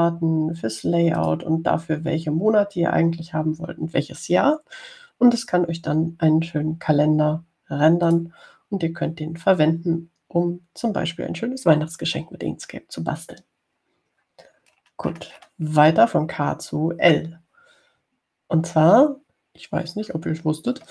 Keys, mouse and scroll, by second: 0.1 click, 0.7 click, 2.4 click, 9.3 click, 16.0-16.9 scroll down 1, 17.2 scroll down 2.